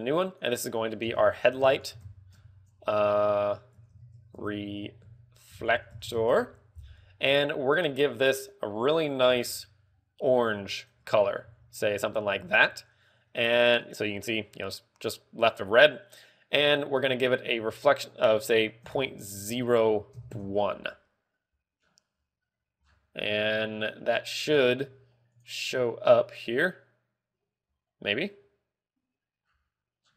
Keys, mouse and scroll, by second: 0.3 click, 0.8 click, 11.3 click, 12.1 ctrl+v, 12.9 ctrl+v, 14.4 click, 17.8 ctrl+click, 22.3 scroll down 2, 22.9 scroll down 3, 23.4 scroll down 1, 25.0 click, 25.0 scroll down 1, 27.2 click, 30.0 scroll down 2.